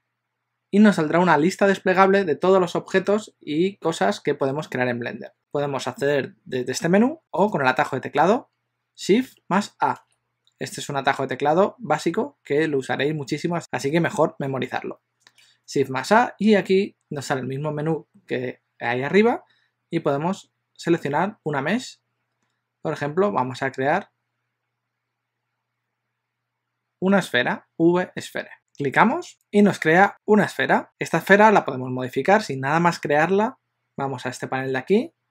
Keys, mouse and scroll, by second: 7.7 click, 10.1 shift+a.